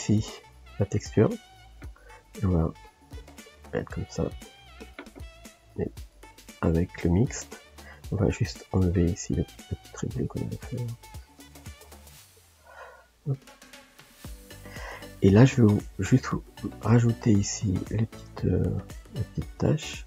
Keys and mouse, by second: 2.2-6.5 ctrl+drag, 7.2 click, 7.6-9.7 middle drag, 9.7-13.3 ctrl+drag, 13.3 shift+middle click, 14.1 ctrl+z, 15.0-16.6 shift+middle drag, 16.6-20.0 drag.